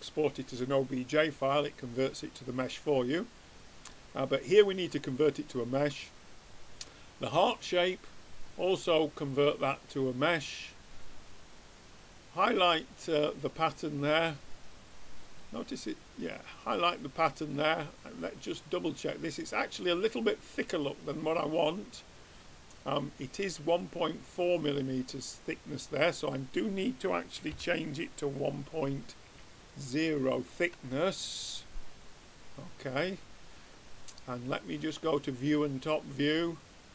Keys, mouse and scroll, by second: 8.0-10.0 drag, 11.4-12.7 drag, 12.7-14.4 middle drag, 18.4-20.1 drag, 22.1-23.4 middle drag, 24.6-26.1 middle drag, 26.1-27.8 drag, 27.8-32.6 middle drag, 32.8-34.2 middle drag, 34.4 middle click, 35.2-36.9 drag.